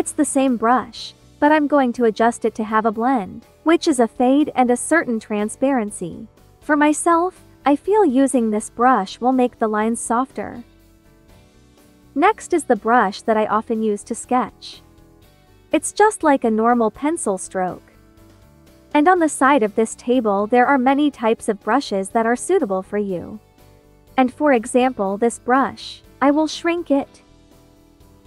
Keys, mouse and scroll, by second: 1.9 click, 7.2 ctrl+z, 7.4 ctrl+click, 10.4 ctrl+z, 11.1 click, 11.5 ctrl+z, 11.7 ctrl+click, 12.6 click, 19.8-22.0 drag, 25.0 ctrl+z, 25.8 click, 26.9 ctrl+z, 27.0 ctrl+click.